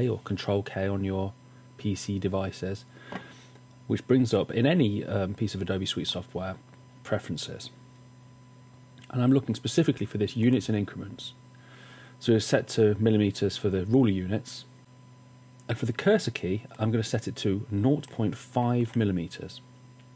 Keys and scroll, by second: 0.0 super+k, 18.8 5.